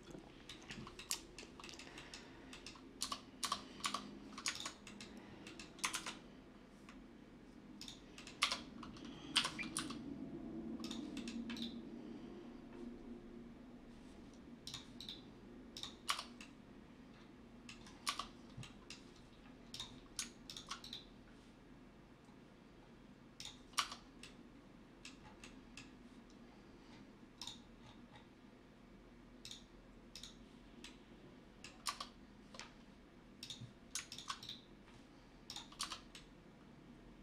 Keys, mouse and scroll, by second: 1.6 Tab, 2.0 Tab, 2.3 Tab, 4.0 ctrl+b, 6.1-7.2 typing, 12.4 Tab, 14.1 Tab, 18.8 Tab, 25.5 Tab, 28.8 Tab, 31.2 Tab.